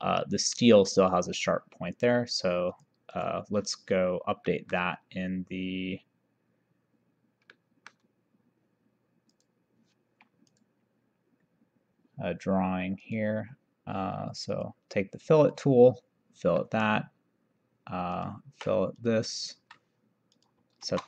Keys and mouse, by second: 2.0 click, 4.6 middle click, 7.6 middle click, 9.4 click, 10.6 click, 13.0 click, 14.6 click, 16.7 middle click, 18.2 click, 19.8 Escape, 20.4 click, 20.9 shift+r.